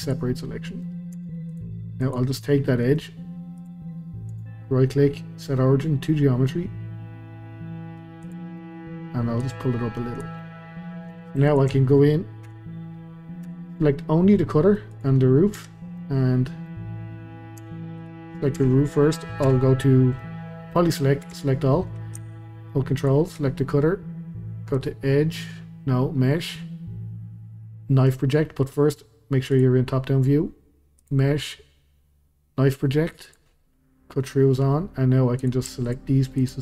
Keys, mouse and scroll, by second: 0.5-1.1 middle drag, 1.1 Tab, 1.5 click, 2.0 click, 2.8 middle click, 3.6 click, 3.9 scroll down 1, 4.3-7.4 right drag, 8.6-9.4 middle drag, 9.4 click, 10.4-11.5 middle drag, 11.5 shift+click, 12.5 KP_Divide, 14.3-14.9 middle drag, 14.9 click, 15.2-15.6 scroll down 2, 15.6 Tab, 16.0-17.6 middle drag, 17.6 Tab, 18.0 click, 18.6 Tab, 19.4 3, 20.2-21.3 middle drag, 21.3 a, 23.0 ctrl+click, 24.8-27.9 drag, 29.5 click, 31.0-34.0 drag, 34.8-35.4 scroll up 1, 35.4 click, 35.8 shift+click, 36.4 shift+click.